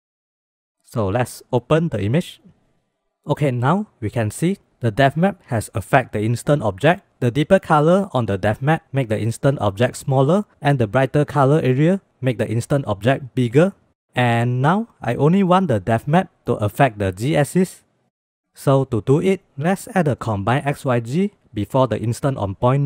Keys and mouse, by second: 6.9 middle click, 13.8 click, 18.7 shift+a, 21.5 click, 22.2 click.